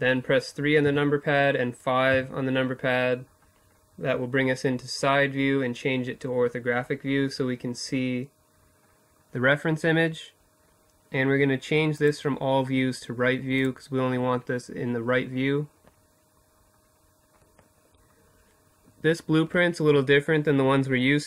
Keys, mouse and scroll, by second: 0.5 KP_5, 2.5 middle click, 10.4-12.1 drag, 14.9-21.2 middle drag.